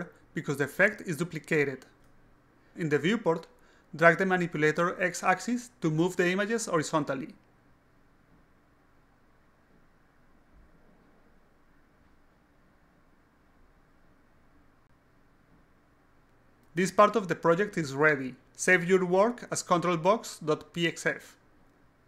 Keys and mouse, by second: 0.3-3.1 alt+drag, 3.6-4.2 drag, 4.4-10.4 drag, 11.0-11.4 alt+drag, 11.6-13.4 alt+drag, 14.1-16.8 alt+drag, 17.9 click, 19.3 click, 20.4-22.0 typing.